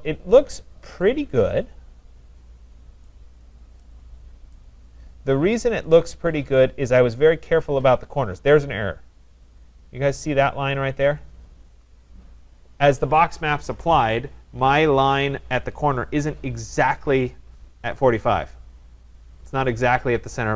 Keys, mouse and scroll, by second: 0.5 middle click, 1.6 scroll, 1.8 middle click, 2.4 middle click, 3.3 right click, 3.5 middle click, 4.8 middle click, 4.9 right click, 5.9 middle click, 6.1-6.8 scroll, 6.8 scroll, 7.5 scroll, 7.7 middle click, 8.6 scroll, 12.2 scroll up 1, 13.3 middle click.